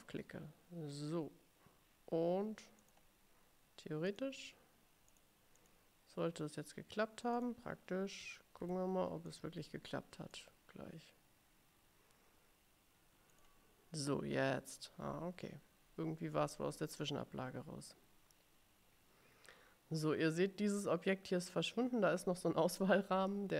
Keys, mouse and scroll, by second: 0.0 click, 2.9 click, 4.2 click, 5.2 click, 5.7 click, 7.4 click, 8.7 ctrl+c, 9.4 click, 10.4 click, 13.5 click.